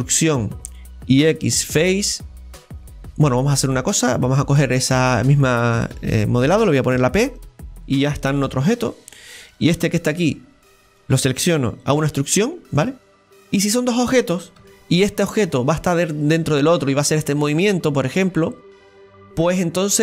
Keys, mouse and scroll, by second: 8.9 right click, 9.8 Tab, 10.8 right click, 11.9 e, 13.2 scroll down 1, 13.4-14.6 middle drag, 14.6 Tab, 15.4 right click, 16.4-19.5 drag.